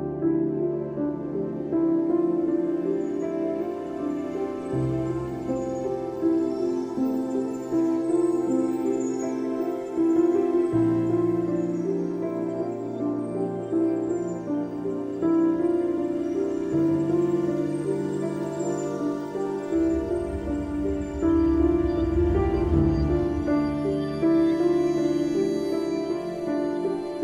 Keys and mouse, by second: 1.3-2.6 drag, 3.9-5.2 drag, 7.9 g, 8.8 click, 12.0 click, 15.6 click, 16.5 click, 17.7 click, 18.6 click, 22.3 click, 23.1 click, 25.5 click, 25.8 click.